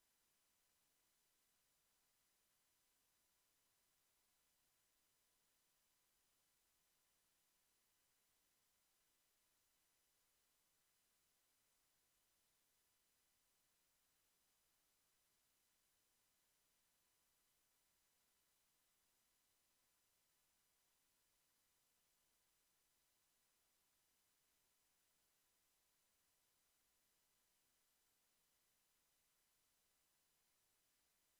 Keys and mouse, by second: 0.0 Escape, 16.9 a, 18.2 Tab, 19.3 s, 20.3 Tab, 21.4 ctrl+s, 22.7 Tab, 23.8 l, 24.5 s, 26.2 Tab, 27.8 ctrl+s, 29.3 KP_0.